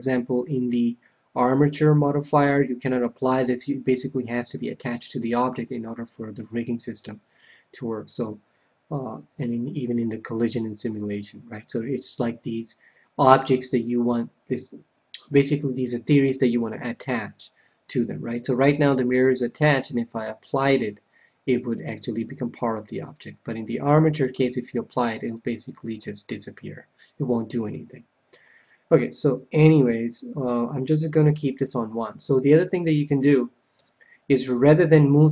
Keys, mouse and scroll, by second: 24.2-27.3 drag, 30.8-33.0 drag, 33.7 KP_1.